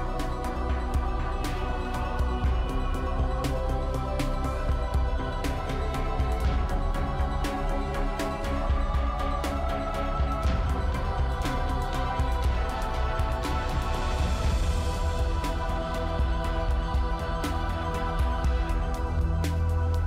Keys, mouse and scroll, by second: 1.7 double click, 4.6 m, 4.8 Return, 7.3-8.1 scroll up 2, 9.9 middle click, 10.6 scroll up 2, 11.5-14.9 scroll down 3.